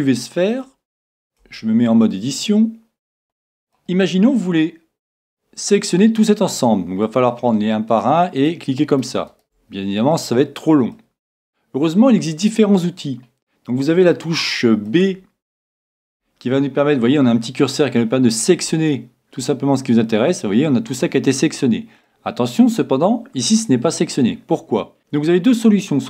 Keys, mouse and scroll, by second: 1.5 Tab, 2.1 middle click, 3.2 a, 3.6-5.1 middle drag, 7.0-8.9 middle drag, 7.9-11.1 right drag, 10.2-14.0 middle drag, 16.0 b, 22.1-23.9 middle drag.